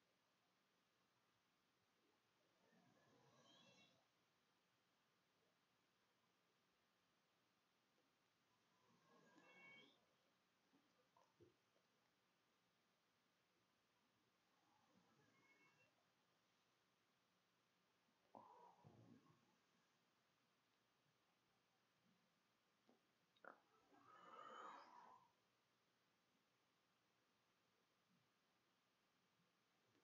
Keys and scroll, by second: 0.0-9.0 typing, 10.0 Return, 12.1 ].